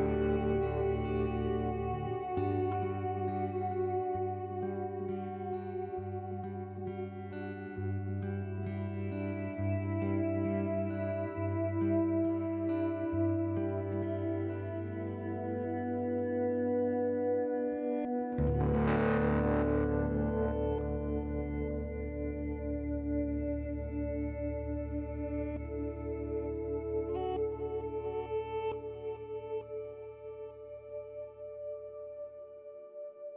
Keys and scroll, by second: 3.0 BackSpace, 3.2 4, 3.4 Return, 22.7 ctrl+s.